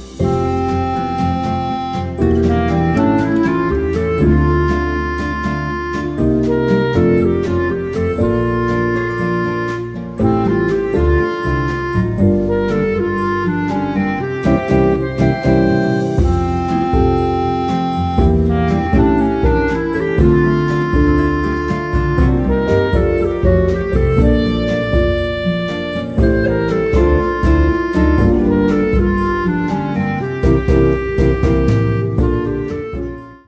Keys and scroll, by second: 2.4-3.2 typing, 6.7-7.5 typing, 12.3 Return, 12.3 0, 15.0-17.1 typing, 21.1 Tab, 21.8 Tab, 23.0 Tab, 24.3 Tab.